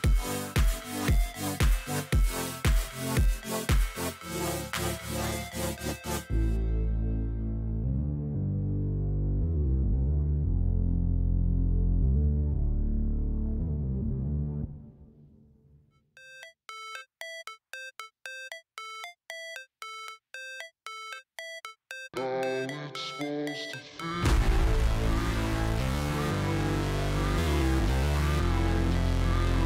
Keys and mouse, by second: 1.2-3.1 drag, 5.5 click, 6.5 click, 7.9 click, 8.6-9.9 drag, 10.2 click, 11.7 shift+click, 12.1 shift+click, 12.2 shift+click, 12.9 click, 14.0 shift+click, 14.5 shift+click, 15.0 shift+click, 15.1 shift+click, 15.5 shift+click, 16.4 click, 17.3 click, 17.9 click, 19.5 shift+click, 20.1 shift+click, 20.3 shift+click, 20.8 click, 21.9 shift+click, 22.5 shift+click, 23.3 shift+click, 23.8 click, 24.9 click, 25.9 click, 27.7-29.1 drag.